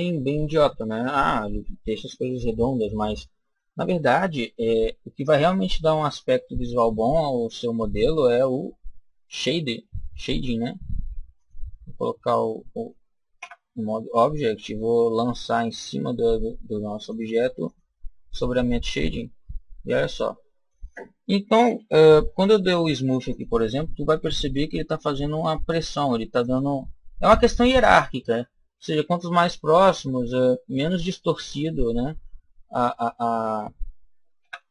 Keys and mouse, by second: 8.1 click, 11.2 click, 13.3 Tab, 15.8-19.5 drag, 18.8 Tab, 19.8-21.7 middle drag, 22.2 ctrl+r, 26.4 click, 28.2-34.3 middle drag, 34.3 Tab.